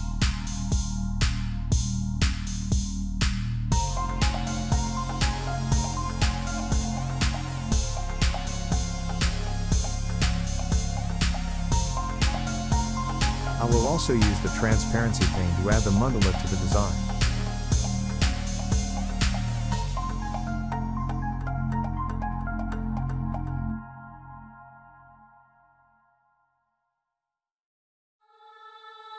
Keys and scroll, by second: 11.9 ctrl+x, 16.7 ctrl+f, 27.1 ctrl+f, 27.3 Down, 27.3 Down, 27.7 Down, 28.1 Down.